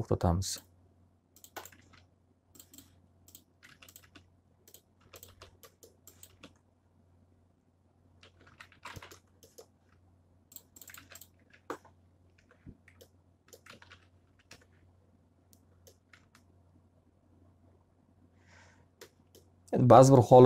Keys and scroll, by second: 1.2 alt+a, 3.6 alt+r, 8.3 x, 8.7 z, 8.8 alt+a, 11.3 q, 12.3 F3, 13.6 alt+a, 14.1 F3, 14.4 F4.